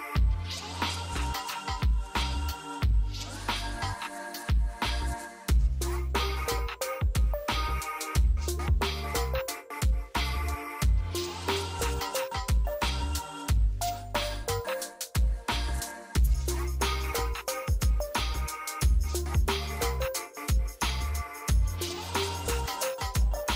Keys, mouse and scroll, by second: 2.1 click, 4.9 ctrl+z, 7.4 click, 9.8 click, 11.4 click, 17.2 scroll up 1, 20.3 click.